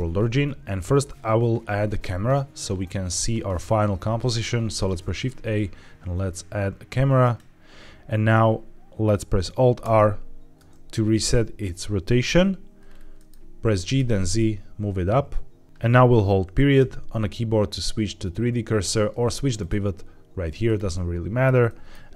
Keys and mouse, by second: 4.6 shift+a, 8.2-8.9 middle drag, 9.7 alt+r, 13.0 middle click, 13.6 g, 13.8 z, 19.5-20.6 drag, 21.5 middle drag.